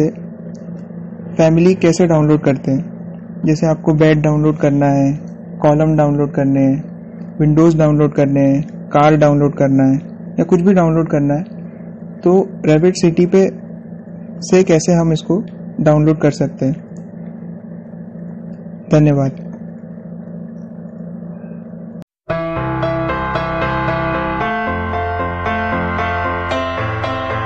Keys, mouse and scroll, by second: 6.7 scroll up 1, 12.6 scroll down 1, 24.1 k.